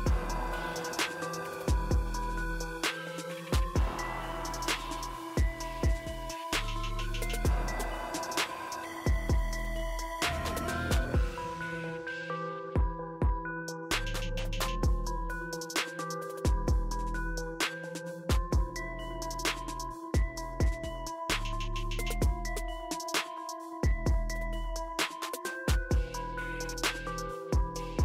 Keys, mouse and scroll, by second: 4.4 click, 5.1 typing, 5.5 ctrl+click, 7.1 typing, 12.5-14.8 drag, 12.5 typing, 19.8 click, 19.8 typing, 21.4 click.